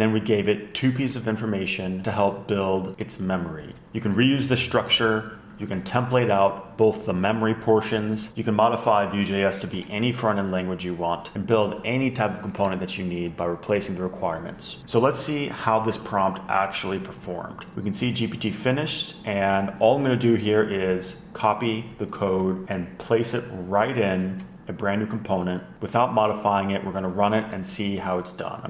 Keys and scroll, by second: 1.7 shift+super+Left, 3.6 shift+super+Left, 3.8 Up, 6.7 super+Left, 8.4 •, 8.8 alt+shift+Left, 8.9 alt+shift+Left, 9.7 alt+shift+Right, 10.5 alt+shift+Left, 13.2 super+Left, 13.4 shift+super+Right, 25.1 shift+super+e.